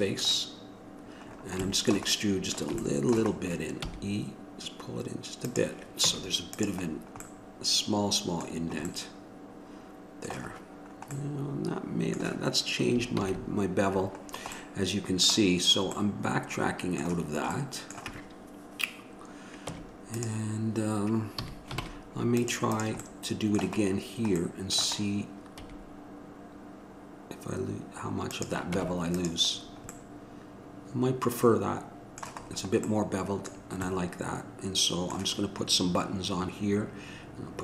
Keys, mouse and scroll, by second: 6.3 Tab, 7.1-9.3 middle drag, 9.8 middle click, 10.8 middle click, 11.1-13.4 middle drag, 13.4 ctrl+z, 14.8-16.2 middle drag, 19.9 Tab, 21.6 a, 22.0 ctrl+Tab, 22.9 click, 23.3-24.8 middle drag, 25.7 e, 28.9 Tab, 32.6-37.6 middle drag.